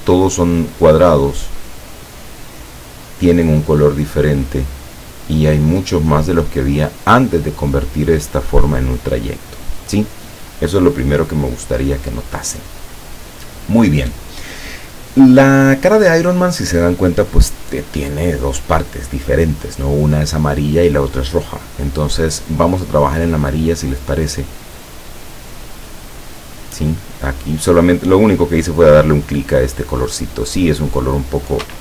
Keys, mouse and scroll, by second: 24.9 click.